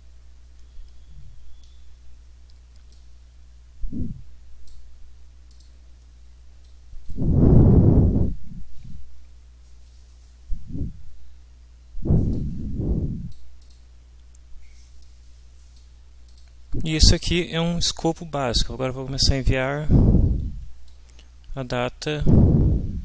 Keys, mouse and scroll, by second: 2.9-4.9 drag, 5.5 click, 7.7 Page_Up, 9.6 Down, 12.3-13.5 drag, 13.6 click, 15.0 click, 16.3 click, 18.4 Left, 21.2 Delete, 22.5 Delete.